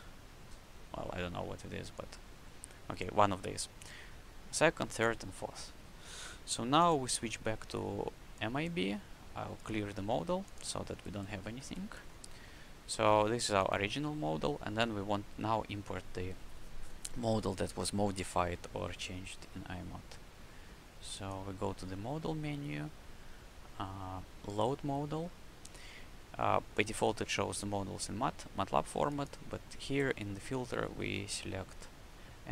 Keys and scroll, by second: 11.3 q.